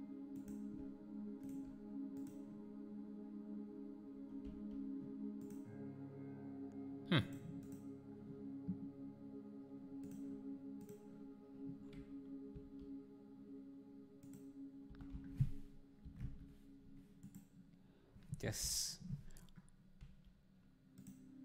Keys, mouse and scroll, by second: 1.4-2.4 shift+right drag, 2.4-12.5 drag, 12.5 s, 14.9 r, 20.0 g.